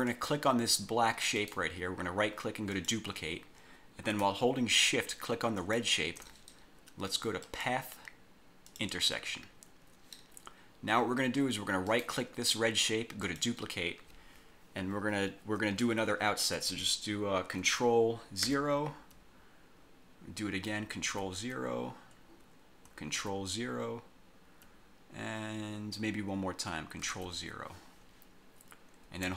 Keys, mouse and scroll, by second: 0.2 click, 1.5 right click, 2.8 click, 5.7 shift+click, 7.6 click, 8.8 click, 12.0 right click, 13.4 click, 18.6 ctrl+0, 21.2 ctrl+0, 23.3 ctrl+0, 27.2 ctrl+0.